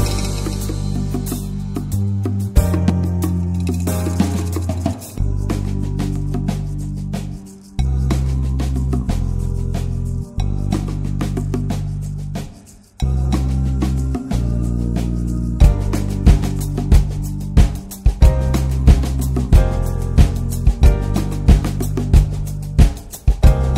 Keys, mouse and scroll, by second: 0.2 ctrl+s, 0.4 middle drag, 0.7 ctrl+s, 0.9 click, 1.3 scroll down 3, 1.5-2.0 middle drag, 2.0 scroll up 2, 2.1 click, 2.4-3.2 middle drag, 3.2 ctrl+s, 3.5 click, 3.9 middle click, 4.4 scroll up 1, 4.6 ctrl+s, 5.0 click, 6.0 click, 6.3 scroll down 1, 6.4 middle click, 6.9 ctrl+s, 7.1 middle drag, 7.2-8.1 scroll up 1, 8.1 click, 8.5-10.1 scroll down 3, 10.1-11.6 drag, 11.6 ctrl+1, 11.9-13.2 shift+middle drag, 13.2 click, 14.1-15.2 scroll down 4, 15.2-16.2 scroll down 1, 16.2-16.8 scroll down 1, 16.8-17.2 scroll down 1, 17.2-18.1 drag, 18.3-21.1 drag, 21.1 scroll down 1, 21.4 scroll up 1, 21.5-22.1 middle drag, 22.1 click, 23.1 middle click, 23.7 click.